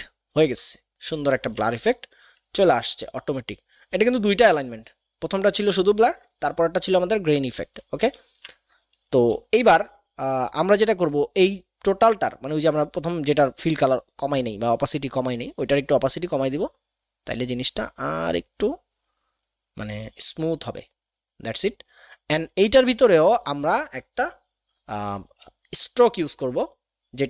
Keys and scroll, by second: 7.5 ctrl+z.